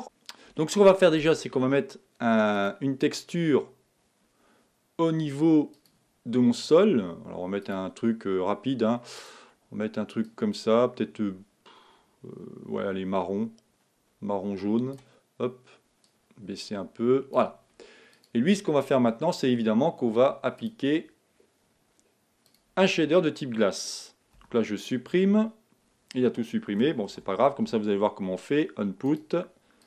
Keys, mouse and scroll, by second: 3.5 click, 3.7 click, 6.8-7.9 drag, 10.5 click, 18.4 click, 20.9 click, 24.5 x, 29.2 shift+a.